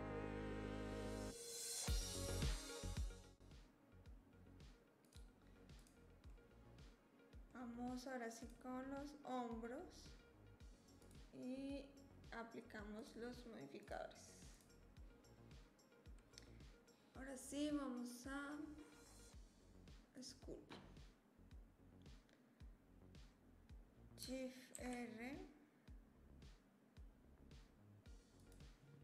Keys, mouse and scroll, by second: 6.3 click, 6.5-6.9 drag, 6.9-7.5 middle drag, 8.4 click, 11.1-13.1 drag, 13.9-14.6 drag.